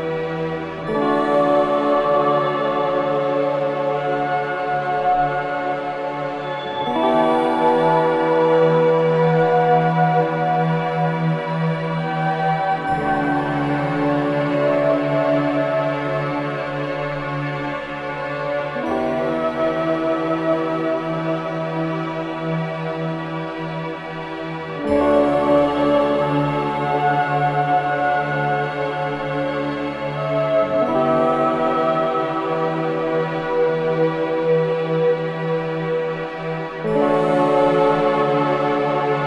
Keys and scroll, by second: 3.4 3, 4.3 ], 11.1 ], 11.6 ], 16.4 ], 19.3 ], 24.5 ], 25.2 ctrl+z, 26.4 ], 33.0 ], 34.2 ], 34.8 ], 35.1 ].